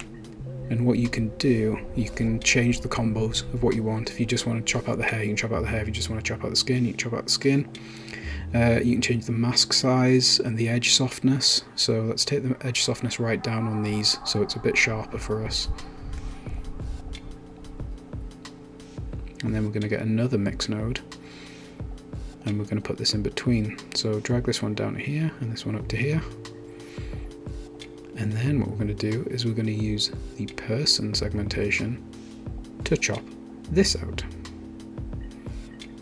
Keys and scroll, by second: 19.3-20.3 typing.